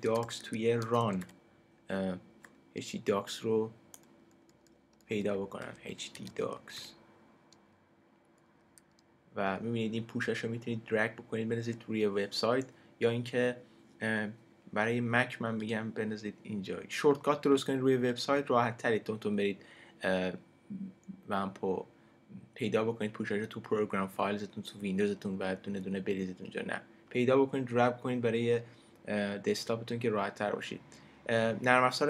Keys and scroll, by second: 0.0-1.7 typing, 3.9-8.6 typing.